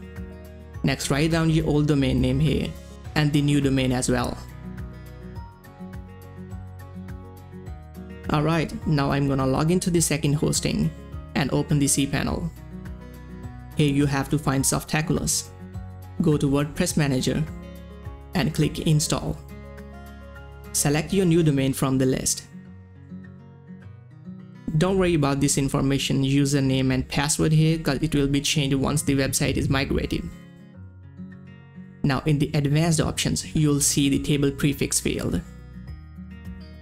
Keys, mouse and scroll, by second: 0.4 click, 1.3 ctrl+c, 1.8 click, 2.9 ctrl+v, 3.4 click, 3.8 Tab, 4.4-5.7 typing, 6.3 click, 8.9 middle click, 8.9 click, 12.7 click, 15.2 click, 15.2 click, 17.0 click, 19.0 click, 20.7 scroll down 1, 21.4 click, 24.1 scroll down 1, 25.2 click, 25.8-28.1 typing, 28.2 Return, 29.3 click, 30.8 scroll down 1, 32.2 click, 35.1 click, 35.1 click.